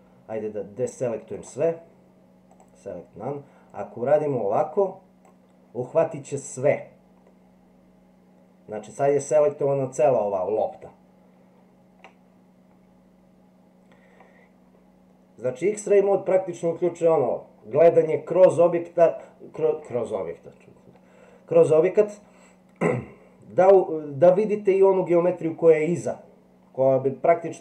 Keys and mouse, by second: 1.4-2.6 drag, 3.7-5.2 drag, 7.2-12.0 middle drag, 22.0-23.0 middle drag.